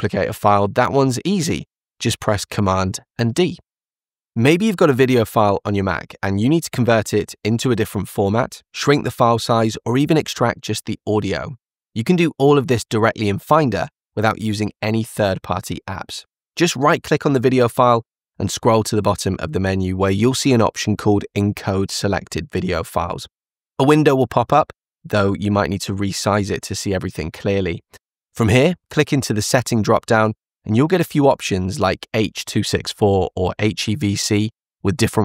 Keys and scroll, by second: 0.6 super+d.